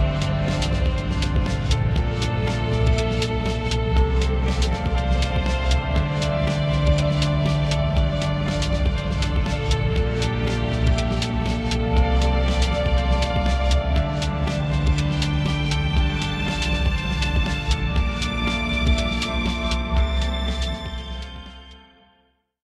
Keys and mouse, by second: 3.2 middle click, 3.9 shift+middle click, 6.1 shift+middle click, 8.3 middle click, 9.8 shift+middle click.